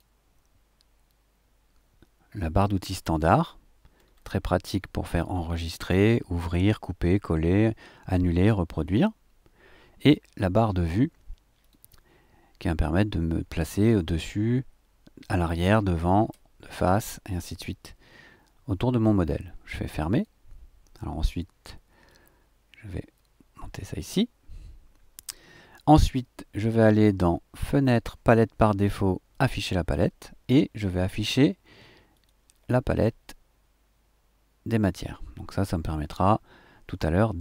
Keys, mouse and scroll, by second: 3.9-4.3 scroll down 1, 5.5 click, 11.6 click, 20.1 click, 22.0-24.1 drag, 27.5 click, 29.3 click, 32.1 click, 34.8 click.